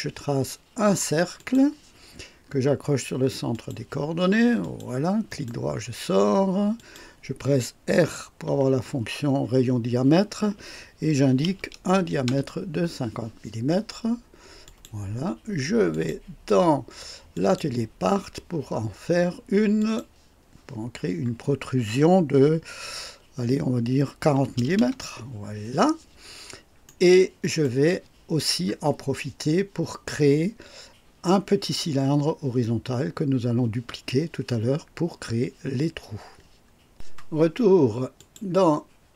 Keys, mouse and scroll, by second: 1.4 click, 3.5 click, 4.6 click, 5.3 right click, 6.7 click, 8.4 r, 11.1 KP_5, 11.5 KP_0, 12.2 Return, 14.6 click, 15.9 click, 17.3 click, 19.8 click, 24.3 KP_4, 24.5 KP_0, 24.8 KP_Enter, 26.8-27.8 right drag, 38.1 click.